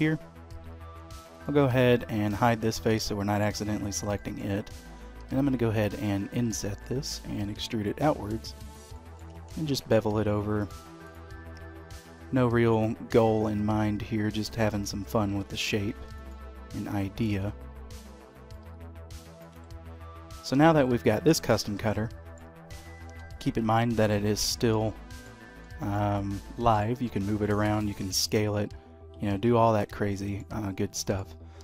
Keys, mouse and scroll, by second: 0.9 3, 1.3 click, 2.0 middle click, 2.8 h, 3.1 middle click, 3.7 click, 4.2 shift+middle click, 5.2 i, 6.8 middle click, 7.4 e, 8.9 middle click, 9.4 ctrl+b, 11.0 click, 11.9 i, 13.2 g, 15.3 i, 16.4-17.5 typing, 18.7 e, 19.5 Tab, 19.8-20.5 scroll down 2, 21.2 middle click, 23.1 g, 24.7 middle click, 25.3-25.8 scroll down 2, 25.8 shift+middle click, 26.2 middle click, 27.1 g, 28.2 s, 29.9 middle click, 30.6-31.0 scroll up 2, 31.0 shift+middle click.